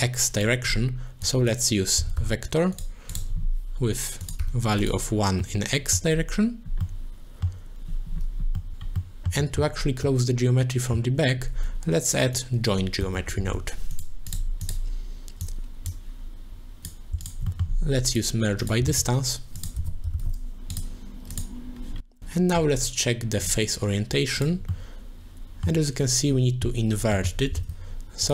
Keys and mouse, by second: 1.3-2.8 drag, 4.2 click, 5.4 middle click, 6.8 click, 7.1 middle click, 8.6 middle click, 9.0 click, 9.1 middle click, 9.5 middle click, 10.1 middle click, 12.5-14.0 drag, 14.6 click, 15.4 click, 15.9 click, 16.2 click, 17.2 alt+shift+click, 17.7 middle click, 18.0 click, 18.6 click, 18.9 shift+a, 20.8 shift+a, 24.5 click, 24.7 middle click, 27.7 shift+a.